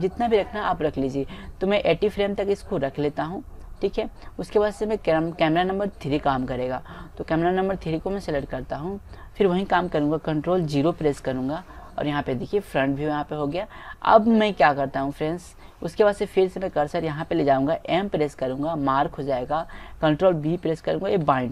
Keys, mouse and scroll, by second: 3.0-4.5 drag, 8.3-9.9 drag, 11.1 ctrl+KP_0, 13.0 middle click, 14.2 click, 15.2-16.5 drag, 18.2 m, 21.2 ctrl+b.